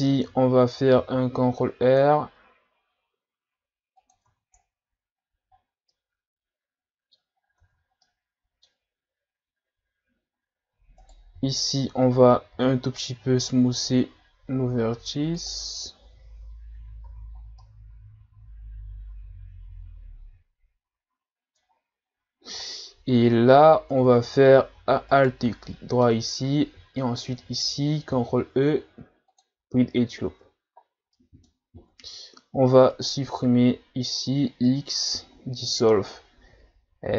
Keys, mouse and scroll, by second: 0.0-0.9 scroll up 1, 0.9 ctrl+r, 4.4 Tab, 4.6-5.2 scroll down 1, 5.2 scroll down 2, 5.9-7.3 middle drag, 7.3 scroll up 2, 7.6 Tab, 8.0-11.0 middle drag, 11.0 right click, 11.4 l, 12.5 w, 16.3 Tab, 16.7-17.0 scroll down 2, 17.0 a, 17.4 scroll down 1, 17.6-20.6 middle drag, 22.0 scroll up 2, 22.6 middle click, 23.1-23.9 ctrl+scroll up 3, 23.9 Tab, 25.2 alt+right click, 25.6-27.0 middle drag, 27.0 alt+shift+right click, 28.1 ctrl+e, 30.3 Tab, 31.2 middle click, 31.6-31.9 scroll up 1, 31.9 Tab, 33.0 alt+right click, 35.1 x.